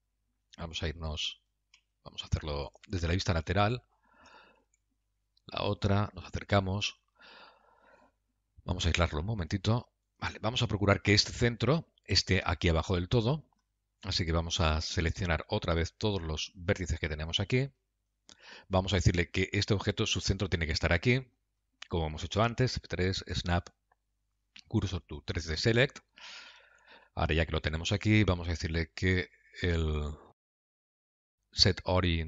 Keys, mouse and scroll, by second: 3.3 KP_3, 5.1 ctrl+KP_3, 6.4 KP_Decimal, 7.3-8.1 scroll down 5, 9.1 KP_Divide, 9.8 g, 15.4 Tab, 17.0 1, 17.5 click, 23.0 F3, 27.1 Tab, 28.8 click.